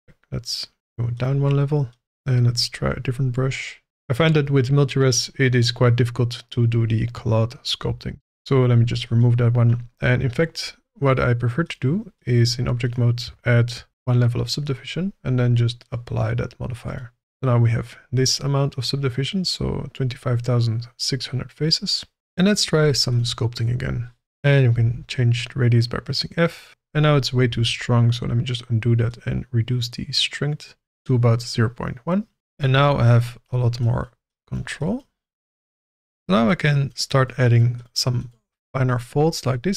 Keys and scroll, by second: 8.1 ctrl+z, 13.9 ctrl+1, 17.2 Tab, 24.2 f, 27.5 ctrl+z.